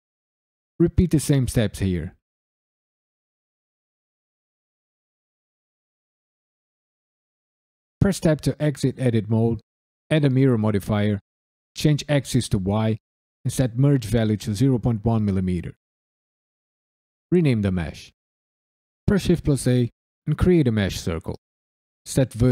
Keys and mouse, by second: 0.0 shift+click, 0.2 f, 0.3 click, 0.7 f, 0.9 ctrl+r, 1.0 click, 1.1 right click, 1.3 click, 1.5 f, 1.6 shift+middle click, 2.2 shift+click, 2.5 shift+click, 2.7 f, 2.8 click, 3.1 shift+click, 3.5 ctrl+f, 3.6 ctrl+r, 3.7 click, 3.8 right click, 4.0 click, 4.3 shift+f, 4.3 shift+middle click, 4.9 click, 5.4 shift+click, 5.6 f, 6.4 ctrl+f, 6.4 ctrl+r, 6.5 click, 6.6 right click, 6.8 click, 7.2 f, 8.0 Tab, 8.8 click, 9.3-10.3 drag, 11.5 click, 12.5 click, 13.5-15.0 drag, 15.5 KP_Decimal, 16.2 click, 16.6-17.6 drag, 19.0 shift+a, 21.9-22.5 drag.